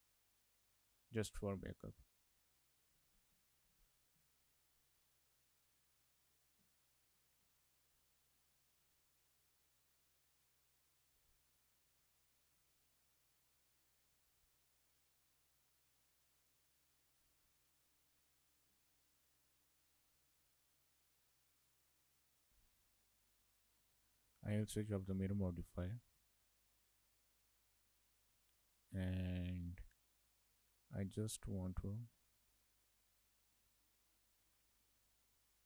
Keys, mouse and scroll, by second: 0.0 click, 0.3 click, 5.8 click, 6.2 click, 7.2 click, 7.6 shift+middle click, 8.0 Tab, 8.4 middle click, 8.7 scroll up 3, 9.0 shift+middle click, 10.7 click, 11.6 click, 12.0 shift+middle click, 12.5 scroll up 1, 12.7 shift+middle click, 14.1 e, 17.5 Tab, 17.9 middle click, 19.5 click, 20.2 click, 22.2 click, 22.3 click, 22.5 shift+middle click, 22.6 click, 23.2 click, 24.1 shift+middle click, 25.0 shift+middle click, 25.8-26.3 scroll up 3, 26.3 shift+middle click, 26.7 shift+middle click, 27.2 middle click, 29.5 scroll up 2, 29.7 shift+middle click, 30.1 shift+middle click, 30.4 scroll up 2, 30.6 middle click, 32.9 click, 34.4 click, 34.9 middle click.